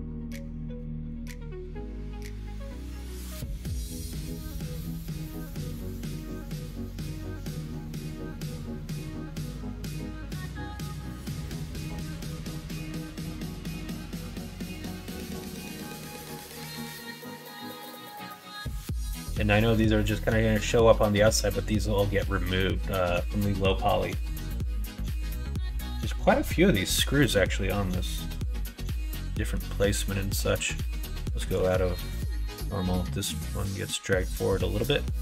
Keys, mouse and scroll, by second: 5.0 click, 6.4-15.6 drag, 15.8 middle click, 16.7-18.8 middle drag, 19.2 scroll up 1, 19.2 middle click, 20.1 scroll up 1, 20.1 middle click, 20.3 scroll down 1, 21.0 scroll up 1, 21.1 middle click, 22.3 middle click, 22.6 shift+middle click, 23.2 middle click, 27.9-29.5 middle drag, 33.4-34.7 drag, 34.9 middle click.